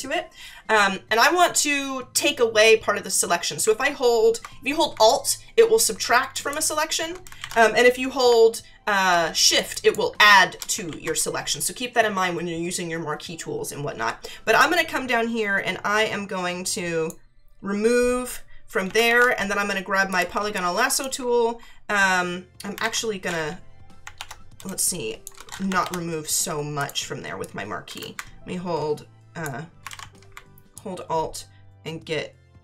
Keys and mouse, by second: 6.3 alt+click, 7.4 ctrl+z, 9.7 shift+click, 10.9 ctrl+z, 14.6 alt+click, 18.8 ctrl+=, 20.1 click, 20.4 space, 20.5 click, 22.8 ctrl+z, 24.6 space, 24.7 click, 26.8 click, 27.4 shift+click, 29.9 ctrl+z, 30.7 alt+click.